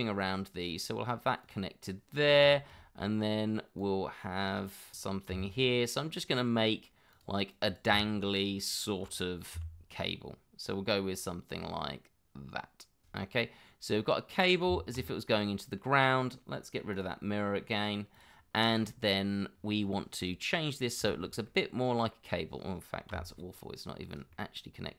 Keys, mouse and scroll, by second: 2.5 shift+middle click, 4.9 shift+z, 5.3 g, 7.5 double click, 7.9 g, 9.5 e, 13.2 middle click, 14.5 scroll down 1, 14.7 Tab, 15.5 middle click, 18.5 scroll up 1, 18.8 middle click, 21.2 shift+middle click, 21.5 middle click, 23.1 g, 24.3 middle click.